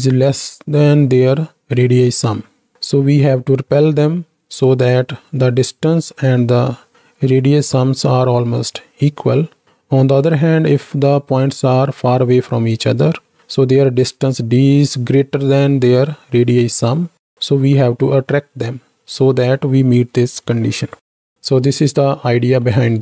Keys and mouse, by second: 9.6-10.2 middle drag, 22.6 click, 22.6-23.0 middle drag.